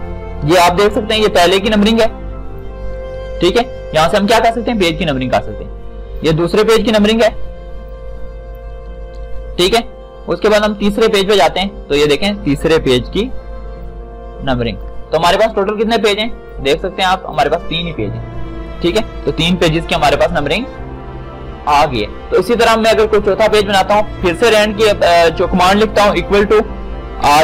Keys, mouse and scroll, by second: 1.4 ctrl+shift+d, 7.0 ctrl+shift+d, 12.6 ctrl+shift+o, 13.1 ctrl+shift+d, 26.4 shift+=.